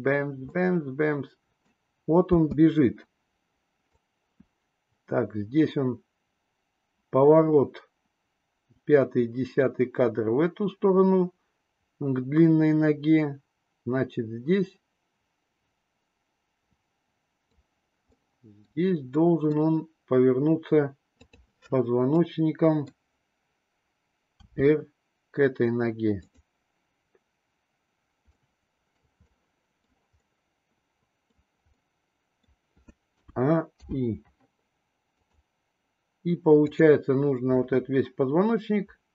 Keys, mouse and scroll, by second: 0.5-1.7 middle drag, 2.4 space, 3.9-17.6 drag, 18.0 middle click, 19.0 middle click, 21.0 click, 22.1-22.9 middle drag, 24.3 r, 28.3-28.9 middle drag, 29.2-29.9 middle drag, 30.2-31.3 middle drag, 31.8 middle click, 33.1 a, 33.7 i, 35.0 click, 36.7 click, 37.6-39.1 middle drag.